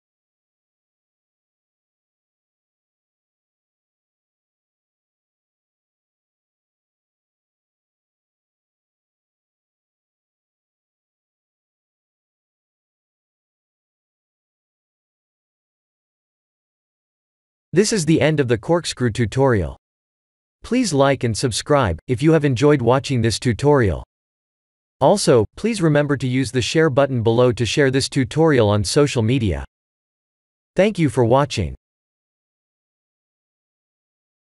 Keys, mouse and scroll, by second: 0.2 click, 1.0 click, 3.9 click, 10.5 ctrl+alt+b, 13.9 click.